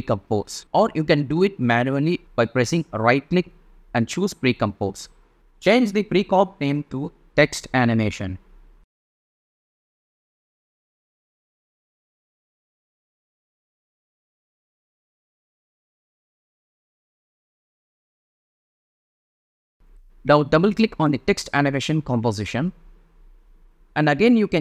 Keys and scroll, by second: 7.6-11.6 typing, 12.9 0, 14.5 BackSpace, 14.8 space, 15.3 l.